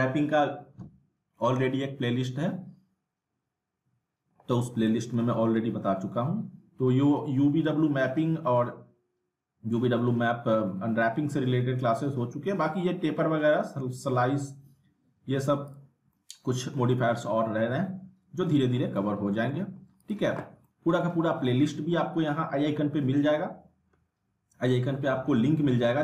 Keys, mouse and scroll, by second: 4.9 middle click, 12.4 scroll up 1, 14.8 scroll up 1, 15.7 click, 16.1-16.7 alt+middle drag, 20.1 click, 20.7-21.2 alt+middle drag.